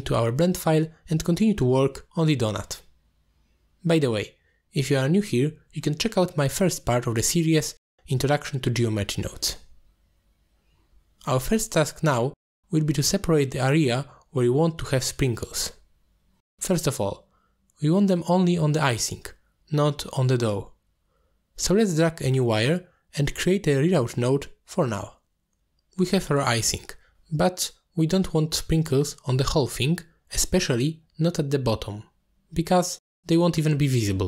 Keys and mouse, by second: 0.1 click, 2.5 t, 5.0 middle click, 5.8 middle click, 12.0 middle click, 15.8 middle click, 19.1-19.5 middle drag, 20.6 middle drag, 21.2 shift+middle drag, 21.5 middle click, 22.9-26.2 drag, 27.0 alt+shift+click, 29.7 middle drag, 30.1 click, 30.6 g, 31.7 click, 32.2 g, 33.4-33.8 middle drag.